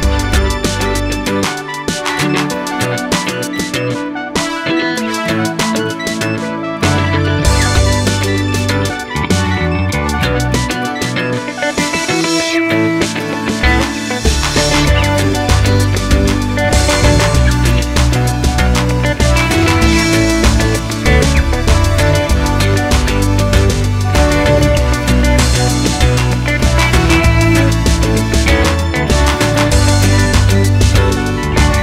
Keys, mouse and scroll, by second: 0.1-1.3 middle drag, 0.6-1.3 scroll down 2, 1.3 click, 1.5 x, 1.9 shift+a, 3.0-3.7 scroll up 2, 3.7 KP_7, 4.8-6.7 scroll up 2, 6.7-10.1 middle drag, 10.1-19.0 drag, 10.8 KP_Enter, 12.9 KP_Enter, 14.5 KP_Enter, 16.0 KP_Enter, 16.9 KP_7, 18.0 g, 20.2-24.0 middle drag, 20.2 KP_0, 21.0 g, 24.0 shift+click, 24.8-31.8 drag.